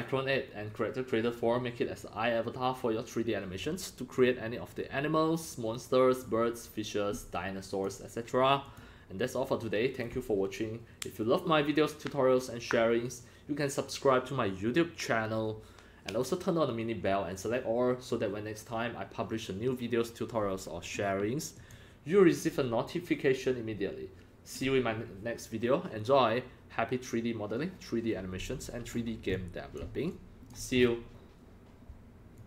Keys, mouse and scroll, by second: 4.2-7.8 drag, 8.6 click, 21.6 click, 28.9 scroll up 5, 29.3 x, 29.3 click, 30.1 click, 30.1-30.5 c, 30.8-31.4 scroll down 7, 32.3 click, 32.3 scroll.